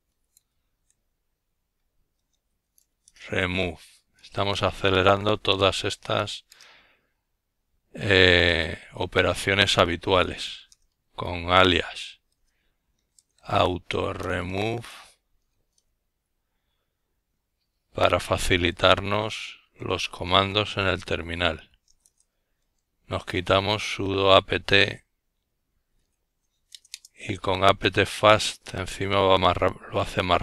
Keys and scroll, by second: 0.0-0.5 typing, 1.5 Return, 3.1 typing, 5.0-6.7 typing, 7.7-11.2 typing, 16.7-18.9 typing, 20.8-23.3 typing, 25.8-30.1 typing.